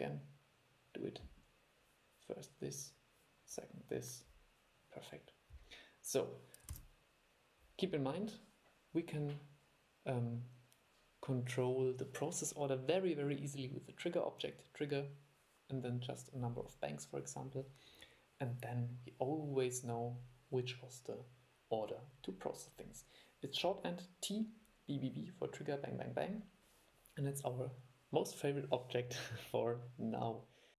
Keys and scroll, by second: 6.9 super+e.